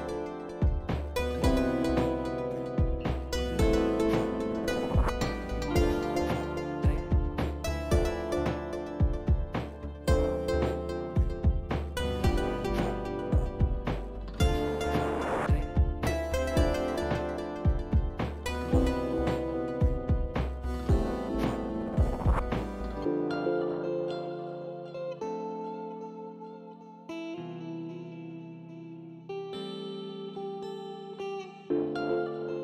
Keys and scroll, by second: 2.3 shift+s, 2.6 shift+s, 4.4 shift+s, 4.9 shift+s, 9.7 s, 10.5 shift+s, 11.8 shift+s, 17.3 shift+s, 17.8 shift+s, 19.9 shift+s, 20.5 shift+s, 22.3 shift+s, 23.2 shift+s, 23.3 ctrl+z, 23.7 shift+s, 27.3 s, 30.4 shift+s, 31.4 s, 32.1 shift+s.